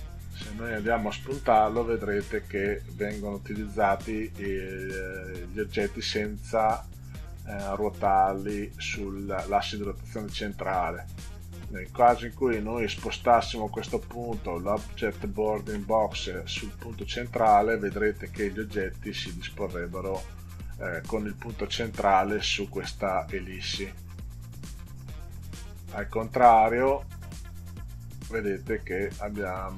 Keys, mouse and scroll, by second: 0.0 click, 1.2 click, 7.9 click, 9.3 click, 11.3 click, 19.5 click, 24.8 click, 27.5 click.